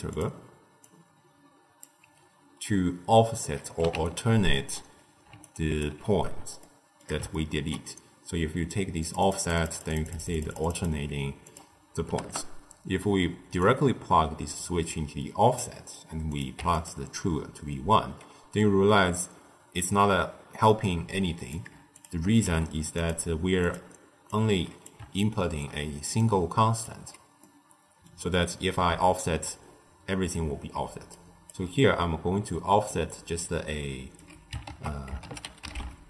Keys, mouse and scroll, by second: 4.0 ctrl+alt+right click, 5.3 alt+right click, 6.5-8.9 shift+middle drag, 8.9-13.7 drag, 16.2 click, 18.5 middle click, 19.0-21.0 scroll down 1, 21.0 drag, 21.8 shift+click, 22.4 g, 23.5 click, 24.2 click, 25.1 ctrl+middle click, 26.0 d, 26.1 click, 26.7 d, 27.3-30.4 middle drag, 30.7 d, 31.0-31.4 right drag, 31.4 d, 31.7 middle click, 32.1-32.8 scroll down 2, 32.8 d, 33.0-34.1 right drag, 34.1 d, 34.6 ctrl+a.